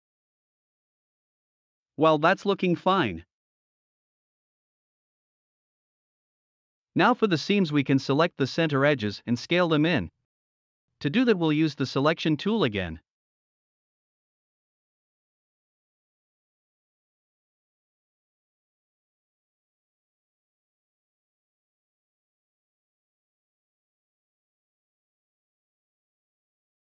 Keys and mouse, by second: 3.0-3.4 middle drag, 3.8-5.6 middle drag, 6.3-6.7 middle drag, 7.1 middle drag, 7.6 middle drag, 8.0 middle click, 8.8 middle drag, 9.8 alt+s, 10.9 middle drag, 12.4-12.7 shift+middle drag, 15.6 alt+shift+click, 16.1-16.4 middle drag, 17.9 alt+shift+click, 18.5-19.3 middle drag, 20.9 alt+shift+click, 21.4-21.9 middle drag, 24.5 alt+shift+click, 25.0-25.6 middle drag, 26.3-26.7 middle drag.